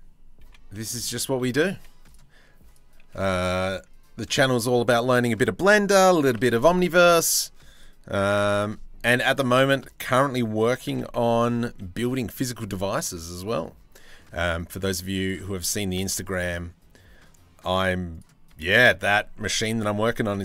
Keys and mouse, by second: 0.0 n, 0.3 click, 0.6 shift+middle click, 1.3 1, 2.3 click, 4.7 click, 5.7 g, 7.8 g, 10.4 g, 15.9 ctrl+r, 18.1 2, 19.8 s.